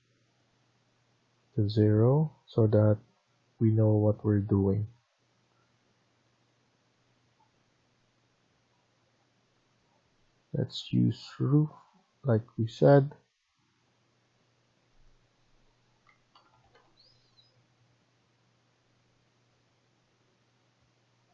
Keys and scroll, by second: 15.8-17.1 typing.